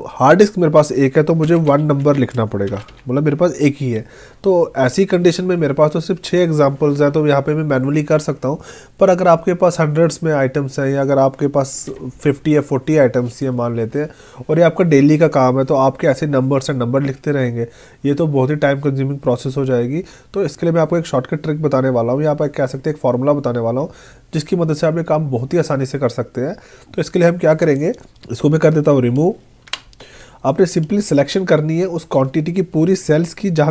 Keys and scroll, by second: 2.2 space, 29.7 Delete.